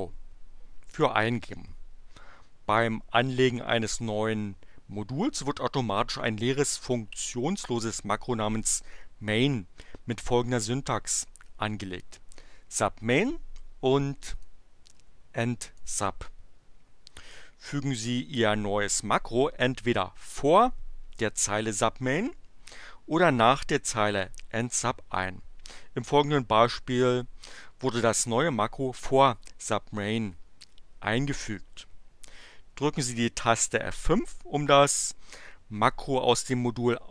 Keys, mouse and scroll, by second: 14.4-16.0 drag.